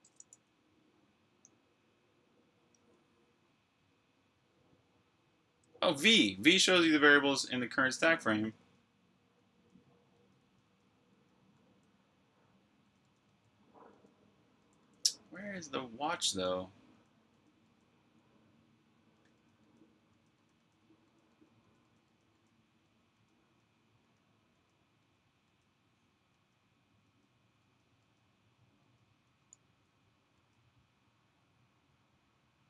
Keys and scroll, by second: 2.3 typing, 5.9-6.2 typing, 7.8-15.3 typing, 16.9-17.5 typing, 18.8-27.5 typing, 29.1 typing, 30.3 k.